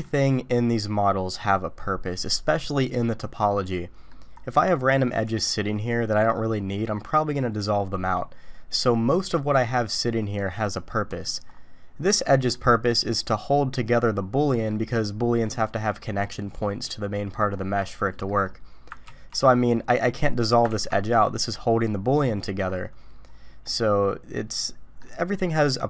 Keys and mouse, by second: 3.5 middle click, 5.1 click, 5.6 middle click, 9.6 middle click, 10.9 middle click, 12.3 middle click, 14.6 middle click, 17.1 middle click, 18.1 middle click, 19.1 ctrl+x, 19.9 click, 23.6-25.0 middle drag.